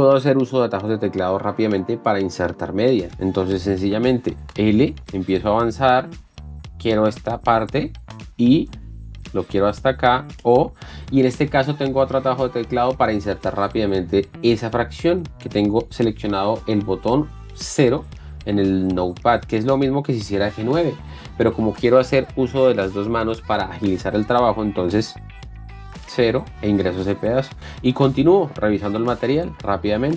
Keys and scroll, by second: 5.0 l, 6.3 k, 8.1 i, 8.5 l, 9.8 k, 10.4 o, 26.6 KP_0, 27.6 l.